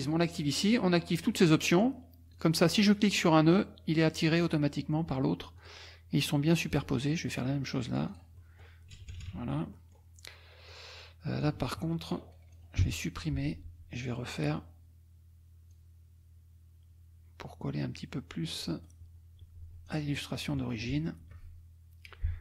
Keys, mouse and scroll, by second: 1.7 click, 2.3 click, 3.2-4.3 drag, 5.6 click, 6.7 click, 7.4 click, 8.9 KP_Subtract, 9.7 scroll down 1, 10.0 click, 10.7 click, 11.4-12.7 drag, 12.8 Delete, 14.3 click, 15.7-18.9 drag, 18.9-19.9 scroll down 1, 19.9-20.3 scroll down 1, 20.3 click, 21.2 F2.